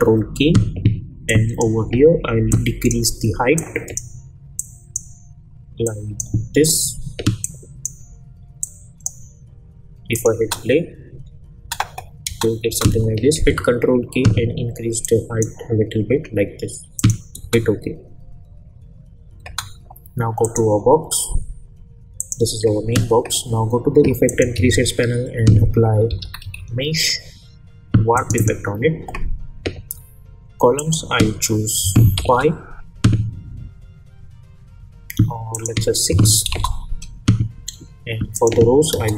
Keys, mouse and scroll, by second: 1.3-1.9 drag, 10.4 space, 13.4 ctrl+k, 15.0-15.6 drag, 17.4 space, 19.4 space, 20.4 click, 24.5 ctrl+a, 25.9-27.1 typing, 28.1 click, 30.7 click, 32.2 Return, 35.5 click, 36.5 Return, 38.3 click.